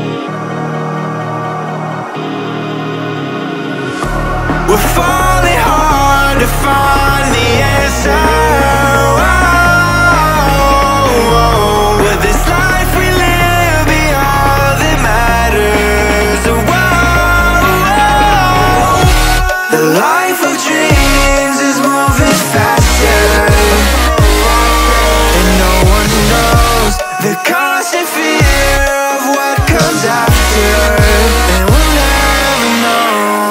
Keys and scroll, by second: 13.4 Return, 15.3 Return, 19.3 Return, 19.7 Left, 21.0 space.